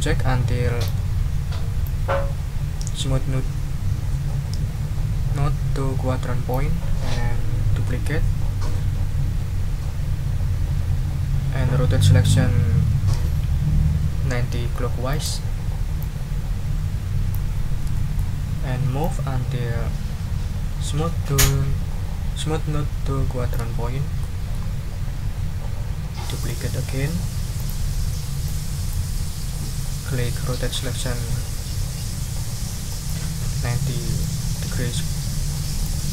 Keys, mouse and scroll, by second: 1.1 ctrl+scroll up 2, 1.8 ctrl+middle click, 1.9-3.1 drag, 3.1-6.7 middle drag, 6.8 ctrl+scroll down 2, 7.9 ctrl+d, 15.1 click, 16.0-17.5 drag, 17.9 ctrl+click, 18.6 ctrl+scroll up 2, 19.0-20.1 ctrl+drag, 23.6 ctrl+click, 23.7-24.0 ctrl+scroll down 2, 24.6 ctrl+scroll up 2, 27.8 click, 27.9-29.1 scroll up 2, 32.9 click, 34.2-36.0 drag.